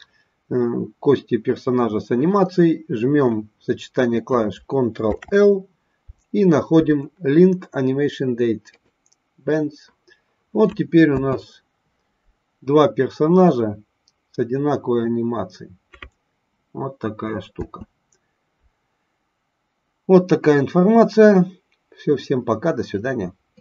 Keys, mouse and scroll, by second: 4.9 ctrl+l, 11.0 space, 18.7 space.